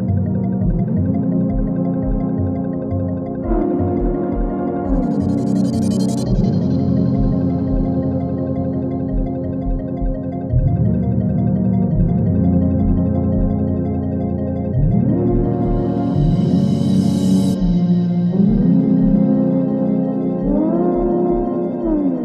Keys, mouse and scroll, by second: 0.4 -, 1.7 click, 2.9 F4, 3.6 click, 7.5 space, 11.4 space, 13.4 click, 16.3 click, 17.9 space, 20.5 space.